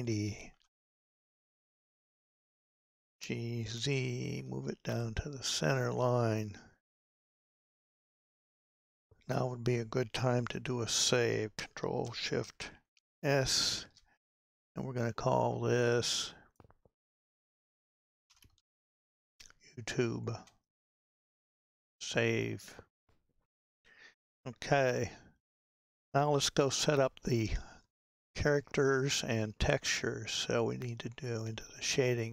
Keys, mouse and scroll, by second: 1.4-1.9 scroll down 5, 2.2 shift+middle click, 3.1 g, 8.4 Tab, 9.3-10.3 scroll up 6, 10.4 KP_Decimal, 13.2 ctrl+shift+s.